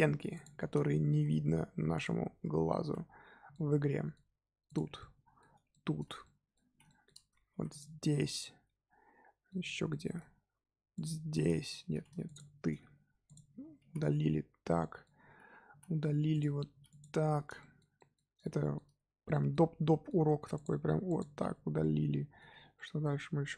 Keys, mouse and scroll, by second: 0.3 shift+click, 0.5 middle click, 1.1 x, 2.4 Tab, 2.8 z, 3.5-4.6 middle drag, 4.6 click, 4.9-5.5 middle drag, 5.5 Tab, 5.7 middle click, 6.7 z, 6.8-7.1 shift+middle drag, 7.1-7.5 scroll up 2, 7.5 3, 7.7 click, 8.2-9.5 middle drag, 9.5 scroll up 1, 9.6 scroll down 1, 9.9-10.9 shift+middle drag, 10.9 shift+click, 11.4-11.9 shift+middle drag, 11.9 ctrl+z, 12.2 shift+click, 12.8 x, 13.6 Tab, 14.8-15.2 middle drag, 15.2 Tab, 16.3 click, 16.7 x, 17.5-19.6 shift+middle drag, 19.6 scroll up 2, 19.8-20.5 middle drag, 20.5 click, 20.8 x, 21.5 Tab, 21.8-22.5 middle drag, 22.5 Tab, 22.7-23.5 middle drag.